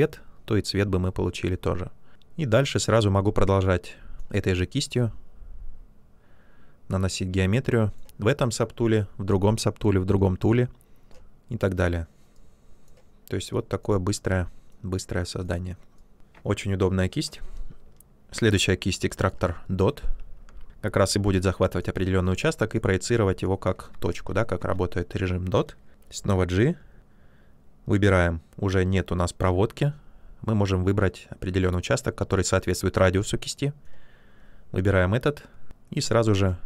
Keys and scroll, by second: 17.7-18.4 typing, 23.8 ctrl+z, 26.1 g.